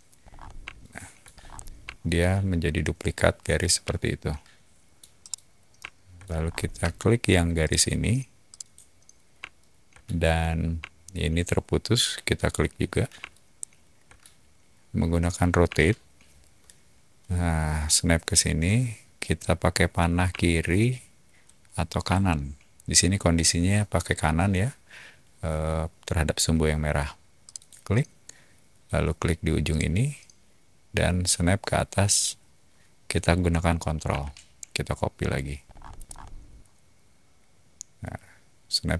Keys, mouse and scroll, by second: 0.2 scroll down 2, 0.7-1.1 shift+middle drag, 1.3 scroll down 2, 1.4 middle click, 1.9-3.5 shift+middle drag, 3.9 shift+middle click, 5.2 middle click, 6.3 scroll down 2, 6.7 space, 7.6 click, 8.5 click, 9.4-9.9 shift+middle drag, 12.3 shift+click, 13.2-14.1 shift+middle drag, 15.6 q, 20.3 Left, 22.0 Right, 27.4 click, 29.7 click, 30.5-31.7 typing, 35.6 ctrl+middle click, 35.6 typing, 36.0 middle click, 36.0 click, 37.2-38.9 typing.